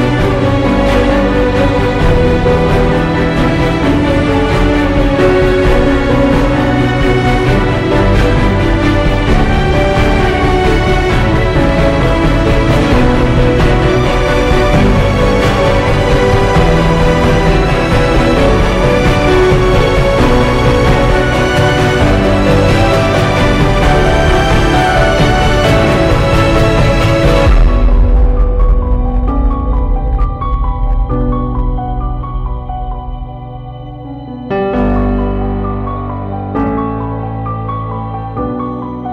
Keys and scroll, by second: 2.1 ctrl+i, 16.8 ctrl+i, 25.0 ctrl+z, 30.5 ctrl+0, 35.1 ctrl+t.